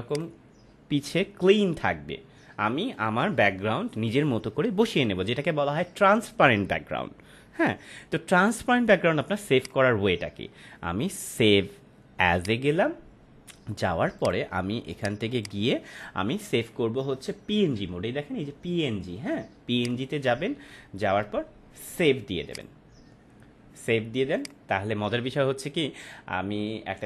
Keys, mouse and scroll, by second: 0.0 click, 9.6 click, 12.3 click, 19.7 click, 22.5 click.